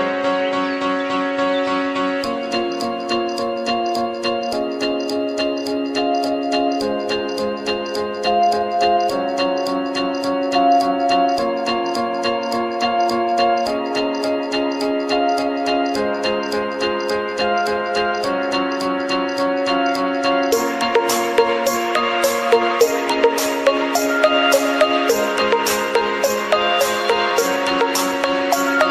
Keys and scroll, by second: 6.8 ctrl+=.